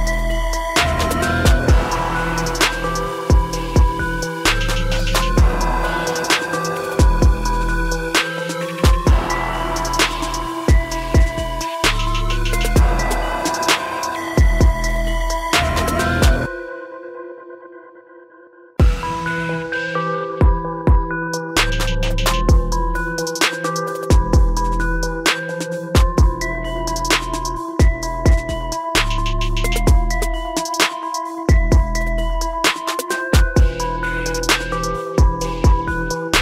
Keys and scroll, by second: 9.7 ctrl++, 33.5 ctrl+-.